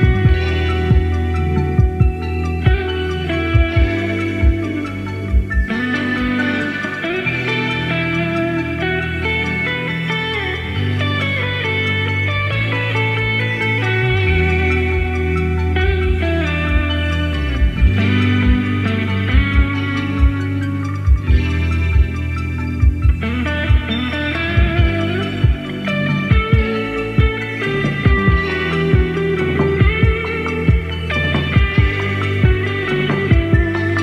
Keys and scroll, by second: 0.0 super+d, 2.9 super+d, 3.1 super+d, 3.2 super+d, 18.0 d, 23.0-23.3 Left, 23.4 typing, 32.9 d.